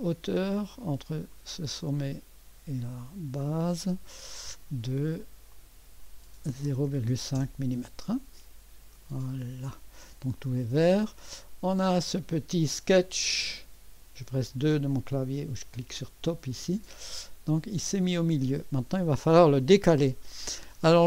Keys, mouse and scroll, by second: 0.1 typing, 1.3 click, 3.4 click, 5.5 click, 6.7-7.1 typing, 7.3 Return, 9.4-10.5 drag, 11.5-12.3 scroll up 1, 12.0-14.6 drag, 12.6 typing, 14.6 2, 17.6-18.1 scroll up 1, 17.6 typing, 18.1-19.9 scroll down 1.